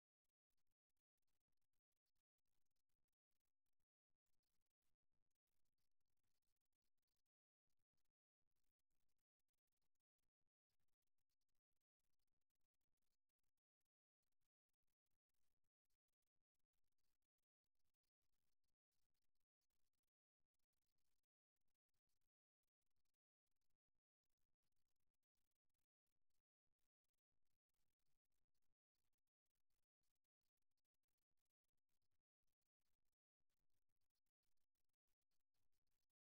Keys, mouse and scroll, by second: 1.1 g, 4.0 click, 6.4 ctrl+r, 9.2 KP_3, 10.9 g, 14.6 middle click, 17.2 KP_1, 19.6 right click, 23.9 KP_3, 26.3 g, 28.3 e, 30.8 e, 34.6 e.